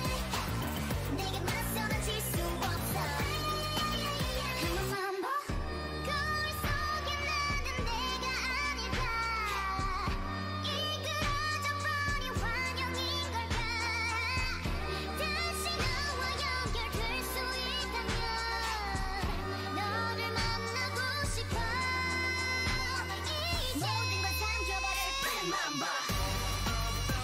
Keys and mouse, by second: 0.9 alt+m, 2.6 alt+m, 3.2 middle click, 4.1 middle click, 4.3 middle click, 5.8 ctrl+z, 6.0 ctrl+z, 6.1 ctrl+z, 6.5 ctrl+z, 6.8 ctrl+z, 7.0 ctrl+z, 7.2-7.7 ctrl+z, 7.9 ctrl+z, 8.3 middle click, 8.8 middle click, 10.0 click, 10.7 f, 11.0 a, 11.8 f, 12.3-14.1 middle drag, 13.6-16.8 typing, 18.1-20.0 drag, 18.2 g, 19.2 a, 20.7-22.9 drag, 22.7 ctrl+r.